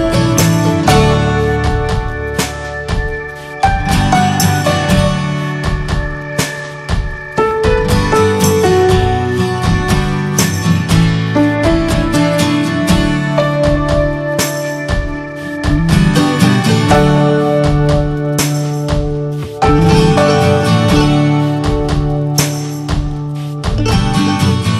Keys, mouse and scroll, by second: 12.5 middle click, 12.6 scroll up 1, 12.7 scroll down 1, 13.3 alt+scroll up 1, 13.6 scroll down 3, 13.9 middle click, 14.0 scroll up 1, 14.8-16.2 shift+middle drag, 16.2 f, 22.3-23.4 drag, 23.4 f, 23.8 scroll down 1, 24.2 scroll up 3.